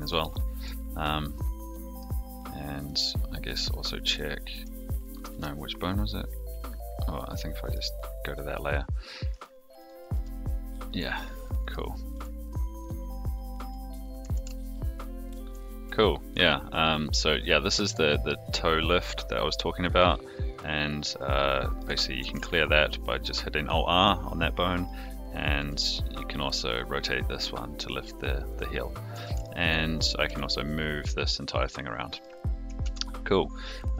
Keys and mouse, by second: 0.3-0.6 middle drag, 1.2-2.0 middle drag, 2.8-3.5 middle drag, 4.0 click, 4.5 r, 5.3 ctrl+z, 7.6 click, 8.5-9.3 middle drag, 10.1 r, 11.6 click, 12.1 r, 13.3 click, 13.5 r, 14.3 alt+r, 15.2 click, 16.3 r, 20.5 click, 21.6 click, 22.2 alt+r, 24.7 click, 25.5 r, 29.2 alt+r, 30.2 g, 32.8 alt+z.